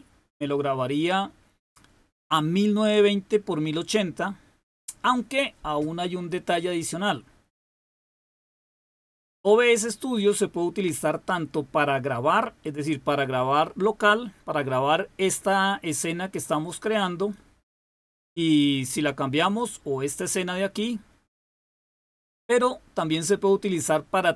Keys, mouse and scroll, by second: 19.3 click.